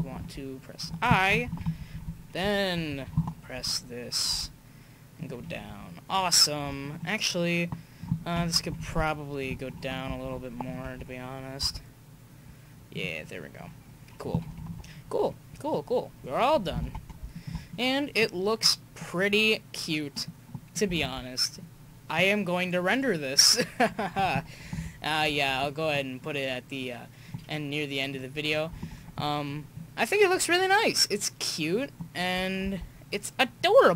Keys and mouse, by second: 0.2 i, 1.5 Right, 1.6 Right, 1.8 Right, 1.9 Right, 2.1 Right, 2.4 Right, 2.9 Left, 4.3 r, 6.9-7.8 middle drag, 8.6 Left, 8.8 Left, 10.1 alt+i, 11.6 r, 15.7-17.1 drag, 16.8 alt+a, 21.0 alt+a, 21.6-23.3 drag, 24.7 KP_5, 28.9 alt+a, 32.7 alt+a, 33.6-33.9 drag.